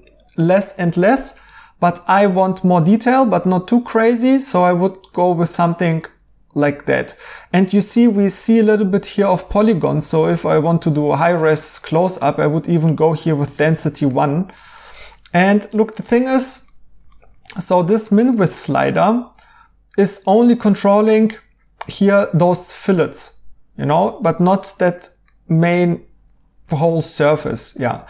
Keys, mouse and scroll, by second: 4.6 right click, 7.6 right click, 9.8 right click, 11.2 right click, 13.7 right click, 24.9 right click, 26.3 right click.